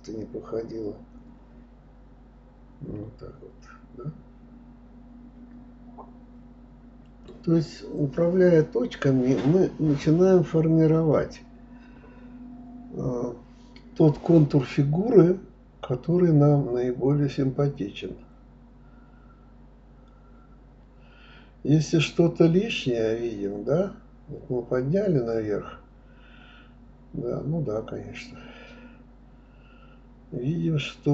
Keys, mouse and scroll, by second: 0.3 shift+click, 1.5 s, 2.7-3.4 middle drag, 3.4 click, 4.1 click, 4.8 shift+click, 5.7 s, 6.6-8.1 middle drag, 9.8 drag, 13.9 click, 14.5 click, 15.2 drag, 16.6 KP_1, 20.1 b, 22.7 g, 24.7 click, 25.4 click, 26.2 Escape, 26.9 ctrl+z, 27.2 click, 27.8 b, 30.2 g.